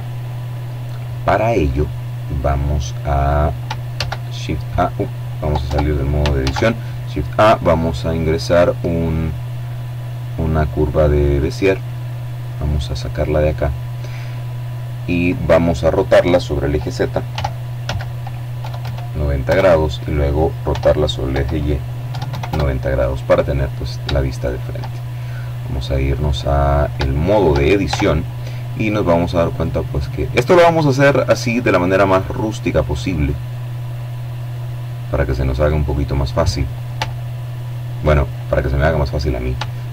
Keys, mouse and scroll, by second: 0.1-0.8 scroll down 2, 1.0-2.3 drag, 2.5 shift+a, 4.2 Tab, 5.0 shift+a, 9.9 click, 11.3-12.7 drag, 12.9-14.3 drag, 15.9 r, 16.4 z, 17.1 KP_9, 17.4 KP_0, 18.0 KP_Enter, 19.3 r, 19.9 y, 20.7 KP_9, 20.9 KP_0, 21.1 KP_Enter, 23.5-24.7 shift+drag, 25.0-25.7 scroll up 1, 25.7 shift+middle click, 26.4 shift+Tab, 28.1 right click, 30.2-34.3 right drag, 34.2 click, 35.6 shift+middle click, 36.4-37.0 shift+scroll up 1, 38.3 shift+middle click, 39.6 shift+click.